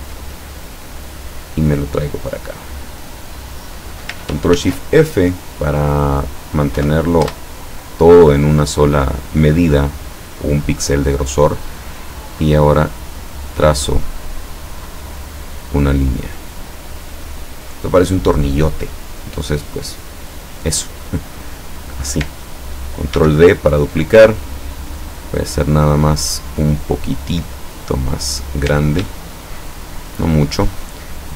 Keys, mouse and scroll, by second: 1.2-3.0 drag, 4.6 ctrl+shift+f, 5.9 click, 6.9 1, 7.4 Return, 11.0 click, 13.7 click, 16.2 click, 20.9 click, 21.7 click, 23.2 ctrl+d, 29.1-30.4 ctrl+shift+drag.